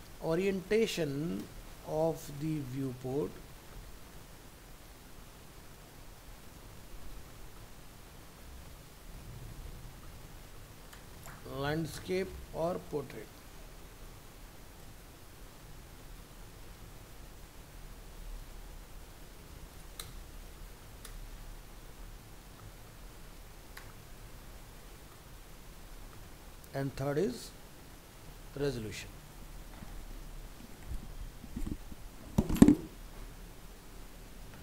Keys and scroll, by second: 33.7 ctrl+s.